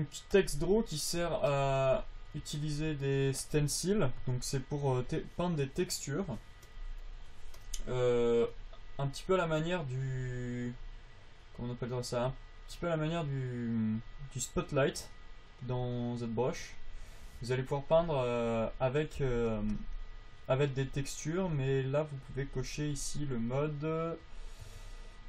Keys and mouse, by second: 1.5 f, 2.1-11.8 drag, 19.5 f.